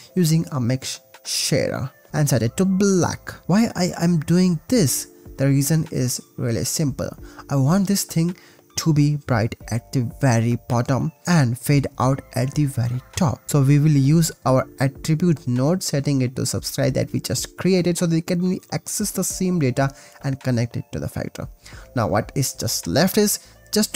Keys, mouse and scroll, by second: 0.8 click, 1.4 click, 4.1 ctrl+shift+click, 5.8 click, 7.0 click, 7.3 ctrl+z, 12.7 click, 13.5 shift+a, 13.5 t, 13.8 click, 14.5 ctrl+v, 15.3 click, 17.8-18.6 drag, 19.6 click, 20.3 click, 20.5 x, 20.5 shift+a, 21.5 ctrl+s, 21.9 click, 22.4-22.8 drag, 23.1 click.